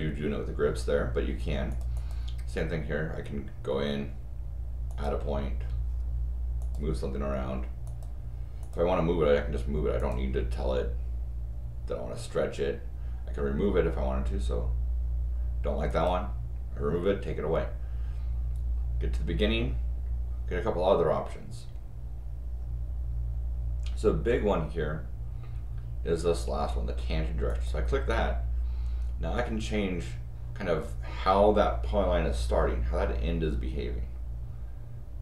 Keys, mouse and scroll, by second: 1.7 click, 1.9 click, 4.9 click, 6.6 click, 7.8 click, 8.6 click, 10.0 click, 15.9 click, 27.5 click.